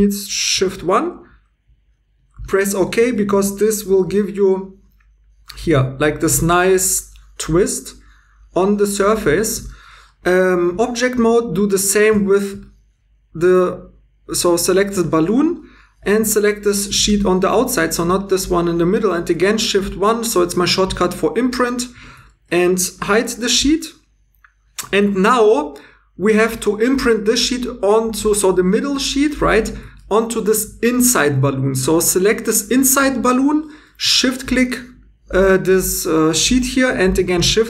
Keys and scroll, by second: 0.5 shift+1, 3.0 Tab, 3.8 h, 5.6 2, 12.1 super+z, 19.6 shift+1, 23.2 h.